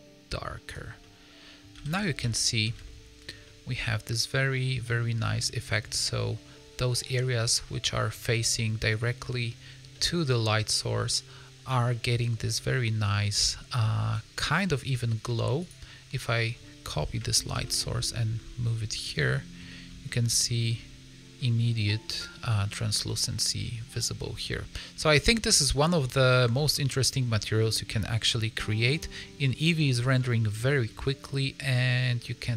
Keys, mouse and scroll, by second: 1.0 middle click, 1.7 a, 1.9 a, 2.3 shift+middle click, 2.8 ctrl+middle click, 3.4 middle click, 7.0 middle click, 7.6 middle click, 9.8 scroll up 1, 9.9 middle click, 11.8 middle click, 12.5 middle click, 14.2 scroll up 1, 14.6 scroll down 2, 14.8 middle click, 15.5 click, 16.1 middle click, 17.5 shift+d, 19.2 middle click, 19.6 shift+middle click, 19.8 scroll up 2, 20.0 middle click, 21.3 middle click, 23.8 middle click, 25.7 middle click, 26.2 shift+middle click, 26.5 scroll up 2, 26.8 middle click, 27.2 scroll down 3, 27.6 middle click, 30.6 shift+middle click.